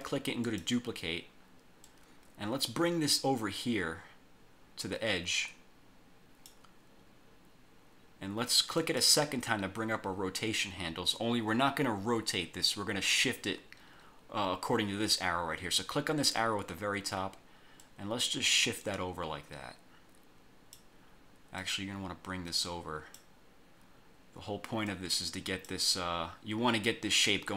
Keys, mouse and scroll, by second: 0.6 click, 2.0-6.8 drag, 8.9 click, 17.9-21.1 drag, 21.7-23.5 drag, 25.0 click, 27.4-27.5 drag.